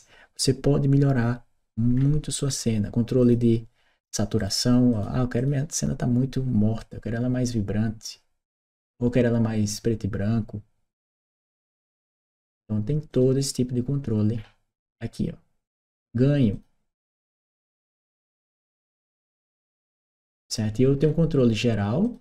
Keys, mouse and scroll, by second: 1.7 middle click, 2.3 middle click, 3.0 click, 4.2 click, 4.7 click, 5.2 click, 6.6 click, 12.9 click, 15.7 click, 16.3 click, 17.3 click, 20.8 middle click, 21.8 click.